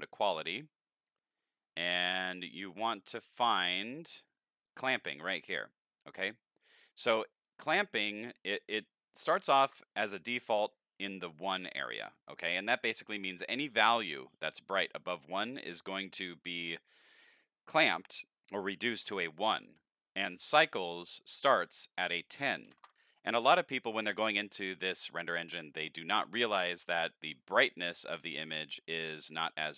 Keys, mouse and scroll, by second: 1.8 click, 2.7 click, 3.3 click, 3.7 click, 4.6 click, 6.0 click, 7.3 click, 8.5 click, 21.9 click, 27.9-28.5 middle drag, 29.0-29.6 middle drag.